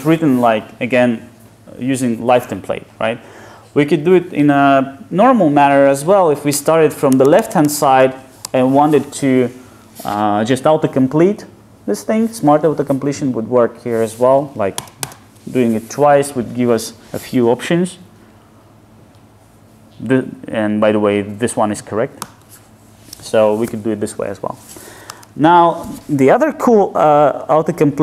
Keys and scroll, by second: 7.1 alt+shift+Right, 14.8 ctrl+shift+space, 22.2 Return.